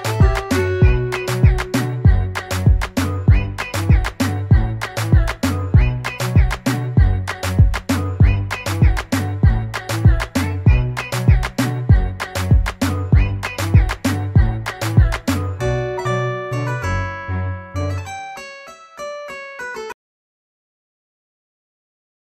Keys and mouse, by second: 0.0-2.7 typing, 4.7 click, 6.7 click, 8.3 click, 12.3 click, 14.3 click.